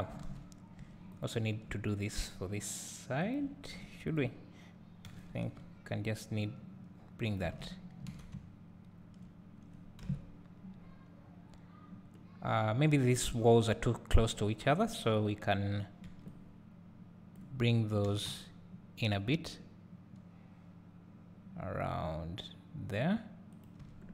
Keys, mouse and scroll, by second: 1.1 click, 3.3 shift+click, 4.0 click, 5.1 g, 7.7 scroll down 1, 8.1 alt+a, 8.3 `, 10.0 KP_7, 11.4 scroll up 1, 17.3 b, 18.1 g, 23.9 Tab.